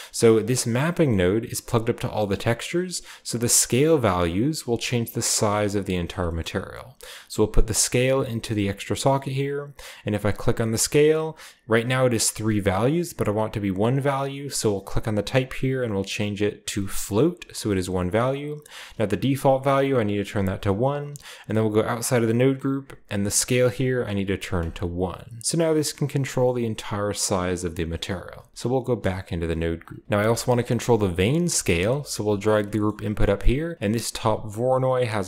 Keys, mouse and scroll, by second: 0.0 g, 0.6-2.4 drag, 0.9-2.5 middle drag, 1.0-2.4 scroll down 1, 2.4-2.8 scroll up 1, 4.2-5.9 drag, 5.8-8.1 right drag, 7.1-8.1 drag, 8.3 click, 10.2 click, 14.8 click, 17.1 click, 19.3 click, 20.3 1, 20.6 click, 21.4 Tab, 23.7 click, 24.0 1, 24.5 click, 25.5-27.7 drag, 27.7 middle click, 28.2 click, 28.5 Tab, 28.7-31.2 scroll down 2, 29.2 click, 29.4-31.2 typing, 29.7 click, 31.2-32.4 scroll down 1, 32.5-33.7 drag, 32.8-34.9 scroll up 1, 34.2 drag, 34.9-35.2 drag.